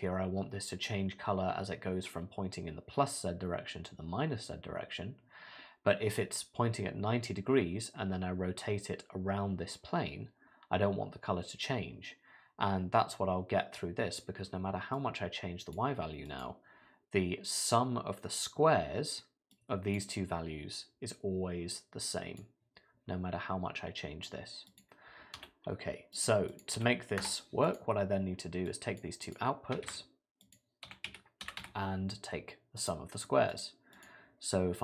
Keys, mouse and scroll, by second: 15.0 click, 16.3 click, 19.5 click, 21.7 click, 24.7 click, 26.5 click, 27.7 click, 28.7 click, 29.3 click, 29.9 shift+a, 34.0 click.